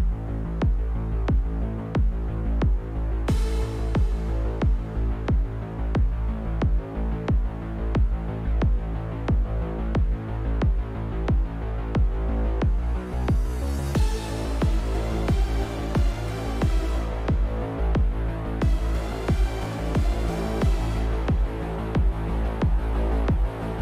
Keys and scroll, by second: 3.6 s, 10.8-13.3 typing, 17.4-20.2 typing, 21.9 q.